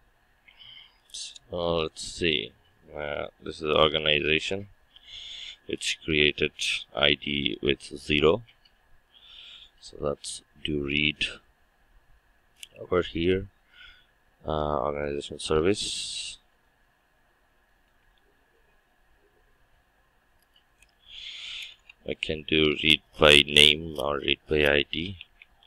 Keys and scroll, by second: 18.1 ctrl+d.